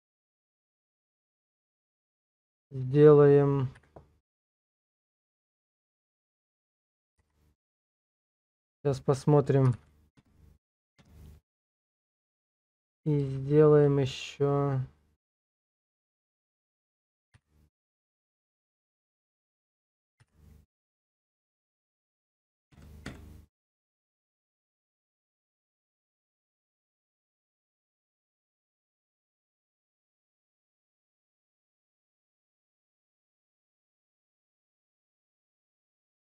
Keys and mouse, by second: 3.8 m, 14.0 shift+click, 17.3 m, 23.1 Return, 24.8 middle click, 25.8 shift+click, 26.5-28.9 middle drag, 29.1 shift+middle click, 30.6 click, 33.8 alt+click, 34.6 shift+click, 35.2 shift+click.